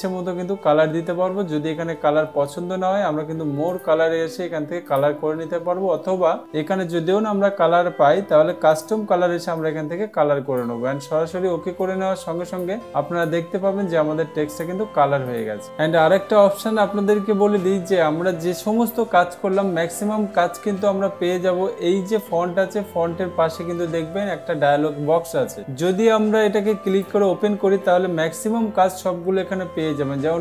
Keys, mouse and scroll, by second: 4.2 click, 5.4 click, 9.3 click, 12.3 click, 15.0 click, 27.4-28.4 drag.